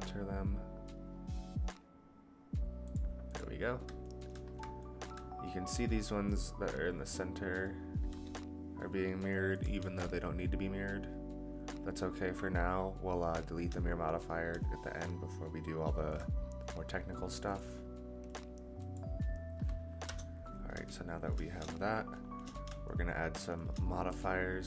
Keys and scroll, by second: 8.1 g, 9.8 ctrl+z, 20.0 KP_0.